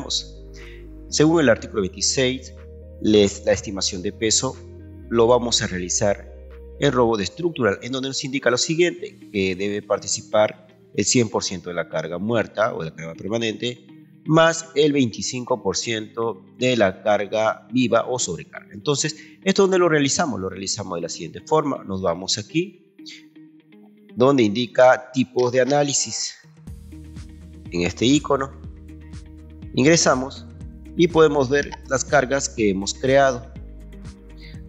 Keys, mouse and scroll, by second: 20.7 click, 26.0 ctrl+2, 27.1-28.2 ctrl+right drag, 28.9 Escape, 29.3 right click, 32.2 ctrl+2, 33.5 ctrl+click.